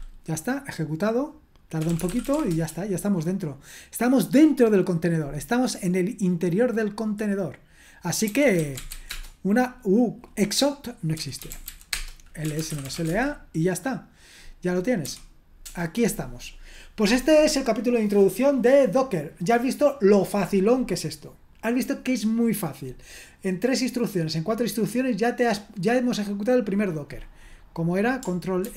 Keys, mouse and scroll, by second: 1.5-2.8 typing, 5.7-8.3 scroll down 1, 8.0-9.4 typing, 10.9-15.0 typing, 28.6 ctrl+r.